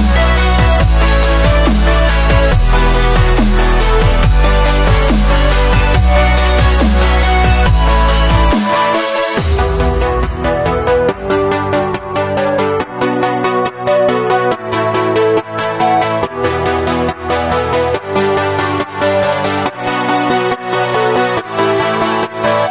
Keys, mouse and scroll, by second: 0.5 shift+a, 2.1-2.6 middle drag, 2.6 scroll up 1, 2.6 middle click, 2.8 scroll down 1, 2.9 s, 4.5 scroll down 2, 4.7 scroll up 1, 4.9-5.5 middle drag, 5.5 click, 6.0 s, 6.7-7.0 scroll down 4, 7.0 middle click, 7.7-8.4 scroll up 6, 8.4 middle click, 9.0 click, 9.6-10.5 scroll up 3, 10.5-10.9 scroll down 5, 11.5 click, 11.7 scroll down 3, 12.2-13.3 drag, 13.3 shift+middle drag, 13.6 scroll up 1, 13.8 middle drag, 14.1-14.5 scroll up 4, 14.5-15.7 shift+middle drag, 15.7-16.3 scroll up 1, 16.3 scroll down 1, 16.6-18.8 shift+middle drag, 19.4 click, 20.3-21.9 drag.